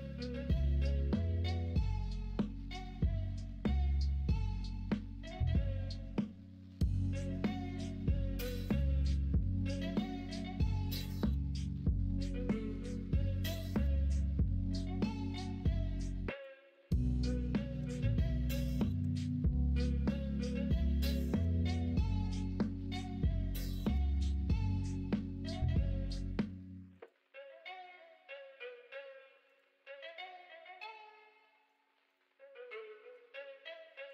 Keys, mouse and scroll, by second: 4.6 l, 6.9 ctrl+z, 9.2 ctrl+r, 13.4 click, 17.8 ctrl+b, 30.0 l, 30.7 m, 32.7 middle click.